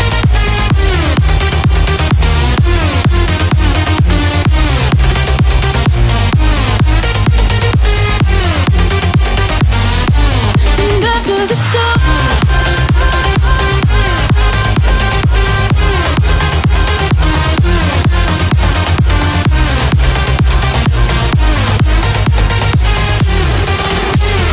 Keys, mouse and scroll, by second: 2.2 ctrl+x, 3.7 scroll up 1, 4.7 p, 4.9 click, 6.0-7.3 typing, 7.0 Return, 7.4 scroll up 1, 7.4 scroll down 1, 8.3 click, 8.8 middle click, 10.4 click, 11.9-12.2 scroll up 1, 12.4 right click, 13.5 click, 16.0 p, 16.5 click, 17.5-18.2 typing, 18.6 Return, 19.2 click, 20.9 middle click, 21.6 click, 23.6 space, 24.1 click.